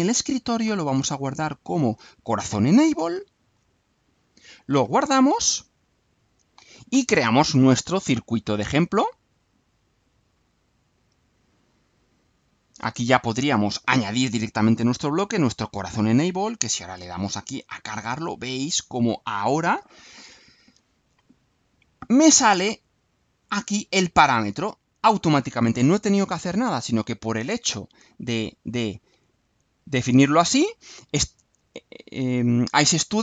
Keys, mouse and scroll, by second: 0.0 click, 2.2 click, 3.2-3.7 alt+drag, 4.2 click, 5.3 click, 8.8 click, 10.3-12.3 drag, 13.8 click, 15.5 click, 16.8 alt+click, 17.6 alt+click, 19.4 click, 27.8-29.3 drag.